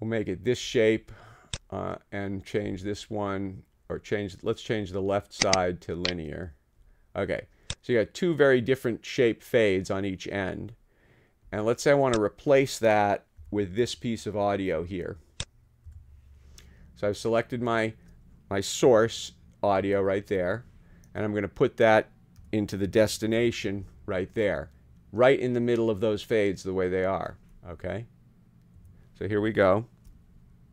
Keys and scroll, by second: 13.4 [, 15.9 ], 19.1 t, 20.4 ⟲, 21.4 ⟲, 22.4 d, 23.4 t, 28.7 ↺.